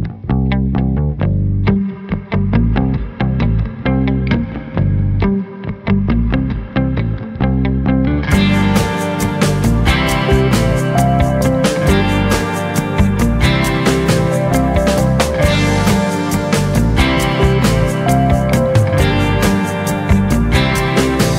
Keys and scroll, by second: 10.6 ctrl+shift+g, 12.5 Caps_Lock, 12.6-14.4 typing, 15.1 Return.